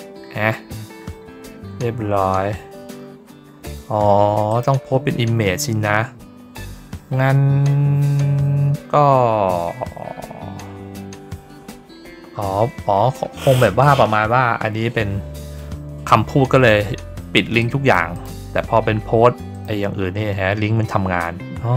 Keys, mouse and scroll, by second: 6.6 scroll up 2, 7.0 scroll down 2, 8.3 scroll down 2, 8.8-9.1 scroll up 2, 10.8 scroll up 2, 12.4 scroll down 2, 13.1 scroll down 2, 14.3 scroll down 1, 17.6 click, 18.1 click, 18.4 scroll up 1, 19.5 click.